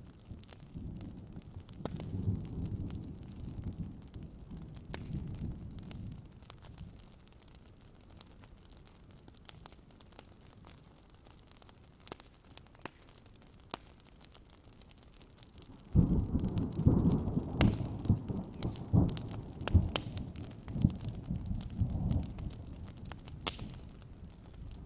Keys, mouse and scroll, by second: 1.2 alt+scroll up 1, 2.2 click, 3.0 ctrl+z, 3.8 click, 5.6-8.8 drag, 8.8 alt+scroll down 1, 8.9 click, 12.1 click, 14.0-15.6 drag, 16.1 click, 16.2-16.6 alt+scroll down 2, 16.7-17.9 alt+scroll up 2, 18.7 ctrl+scroll down 1, 19.2-20.3 alt+scroll down 2, 20.4-23.2 alt+scroll up 2.